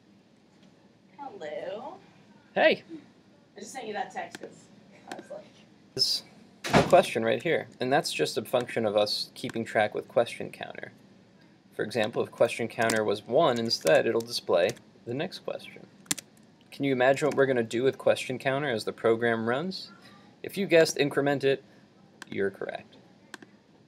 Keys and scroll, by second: 7.0 super+Tab, 13.6 super+s, 14.0 super+Tab, 14.8 super+r, 16.2 super+Tab.